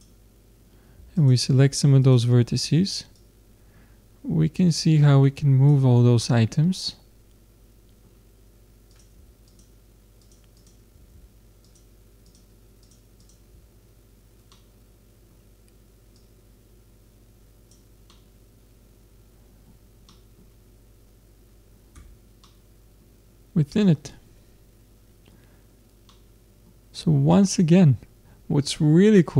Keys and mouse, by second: 6.2-8.0 middle drag, 8.9-14.5 drag, 14.5 middle click, 16.2 middle click, 16.4-18.1 drag, 18.1-21.9 middle drag, 21.9 Tab, 22.5 middle click, 24.5 middle click, 24.7 middle click, 25.5-26.5 middle drag.